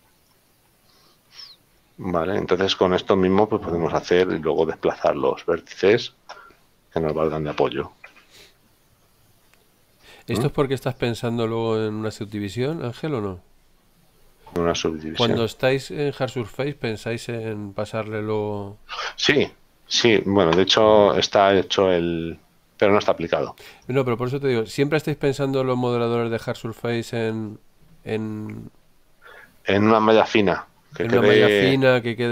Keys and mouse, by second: 0.0 click, 2.1 middle click, 4.4 shift+middle click, 9.4 shift+middle click, 23.9 click.